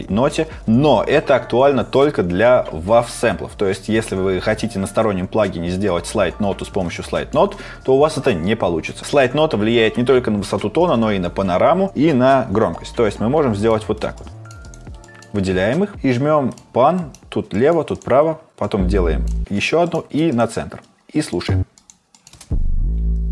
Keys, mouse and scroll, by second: 14.2 click, 14.6 right click, 15.0 click.